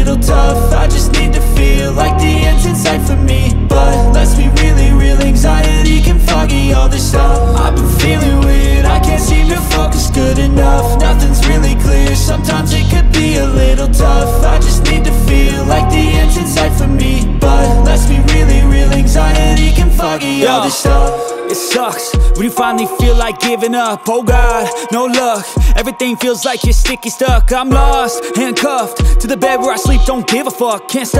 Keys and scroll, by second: 0.0-0.5 typing, 2.5-3.8 typing, 9.9 ctrl+space, 10.5 ctrl+space, 25.5-26.4 typing.